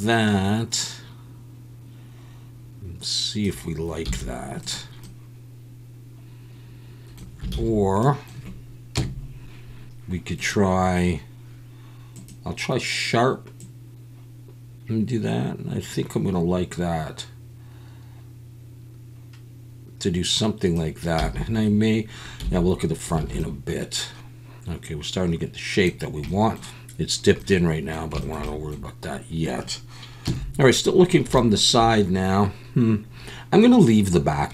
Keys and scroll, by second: 4.1 z, 7.5 ctrl+z, 8.9 KP_3, 21.2 z, 22.4 `, 23.2 alt+a, 30.2 KP_3.